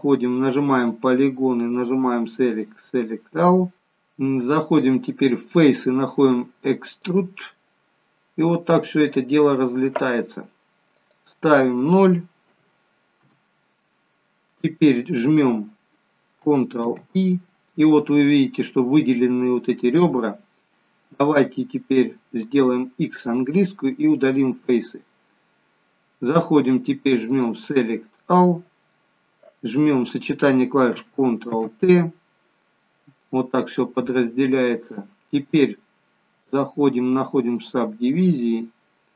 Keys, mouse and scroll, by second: 0.8 click, 1.7 click, 5.5 click, 10.9 click, 16.8 ctrl+i, 18.2-18.8 scroll up 5, 20.3-21.3 scroll down 3, 21.3-21.9 scroll down 1, 23.0 x, 27.2 click, 31.3 ctrl+t, 36.4 click.